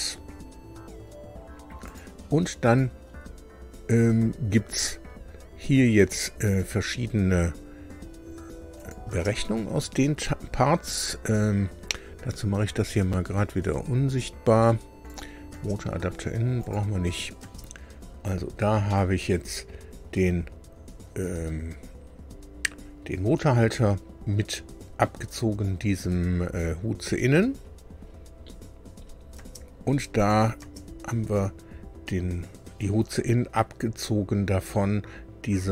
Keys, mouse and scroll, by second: 1.8 click, 6.0 click, 8.7 click, 9.0 space, 12.3-12.6 scroll up 2, 13.5-13.9 scroll down 2, 15.0 click, 15.5 space, 16.6 click, 17.4 space, 18.8-23.7 drag, 29.3 space, 30.1 click, 30.6 space.